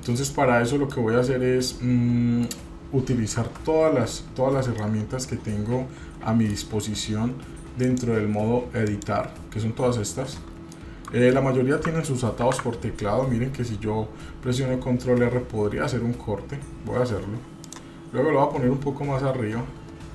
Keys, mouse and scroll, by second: 0.3-0.9 scroll up 1, 0.9 middle click, 1.7 middle click, 3.4 Tab, 4.8-6.6 middle drag, 7.8-9.0 drag, 10.7 middle click, 12.4 ctrl+r.